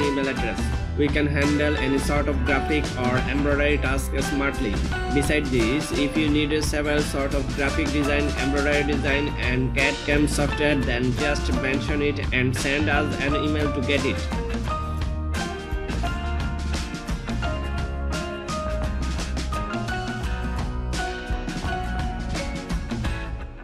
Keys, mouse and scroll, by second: 11.1 alt+super+scroll down 1, 13.0 super+click.